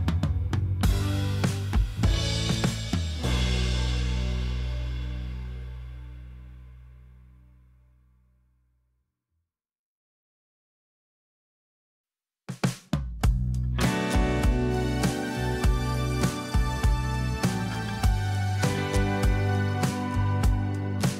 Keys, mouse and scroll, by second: 5.7 ctrl+d, 6.2-7.1 alt+scroll down 4, 7.2 alt+scroll up 1, 7.8 alt+scroll up 1, 7.9 alt+scroll down 1.